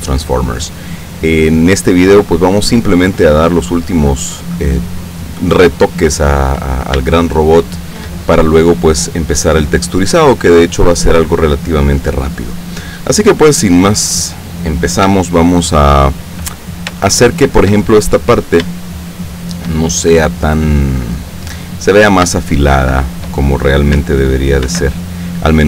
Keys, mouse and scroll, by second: 0.0-3.0 middle drag, 5.6-6.2 scroll up 2, 7.4 shift+middle click, 16.5-16.9 ctrl+scroll up 3, 17.2 shift+middle click, 19.0 shift+middle click, 20.2 shift+scroll down 1, 22.7 shift+middle click, 24.8 ctrl+r.